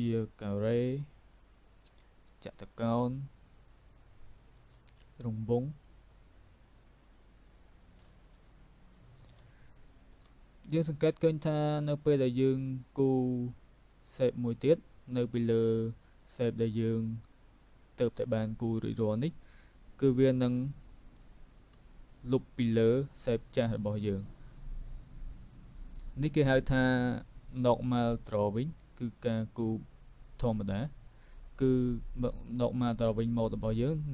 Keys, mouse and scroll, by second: 0.5 v, 0.8 click, 2.6 click, 4.5 v, 4.8 click, 5.7 click, 6.9 click, 8.5 alt+click, 10.0 v, 10.3 click, 12.7 click, 12.7 click, 13.8 click, 19.4 click, 21.8 click, 24.2 click, 24.6 click, 25.9 click, 27.8 click, 28.9 click, 29.4 click, 31.0 double click, 32.0 click, 33.7 click.